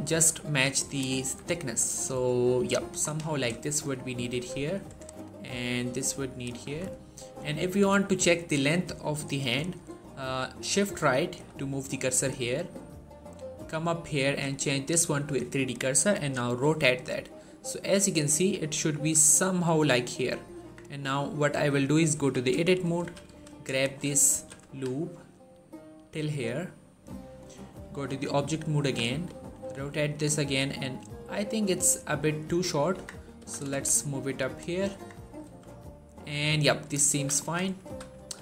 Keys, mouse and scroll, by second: 0.0 Tab, 0.6 click, 1.0 s, 2.7 click, 2.9 scroll down 1, 3.1 shift+middle click, 3.7 z, 4.2 z, 4.6 click, 5.3 s, 6.1 click, 6.5 Tab, 7.6 z, 9.5 shift+middle click, 9.9-10.5 scroll up 1, 11.0 shift+right click, 12.1-14.0 scroll down 1, 14.2 click, 16.5 r, 19.0 right click, 20.4 Tab, 22.0 z, 22.8 g, 23.1 y, 23.7 right click, 24.2 g, 24.5 x, 26.9 click, 27.7 Tab, 29.5 r, 32.4 right click, 32.7 Tab, 33.2 g, 33.5 x, 34.3 click, 34.7 Tab, 35.3 r, 36.5 right click, 37.0 z, 37.3 shift+middle click, 37.5 scroll up 1, 37.7 g, 38.0 x.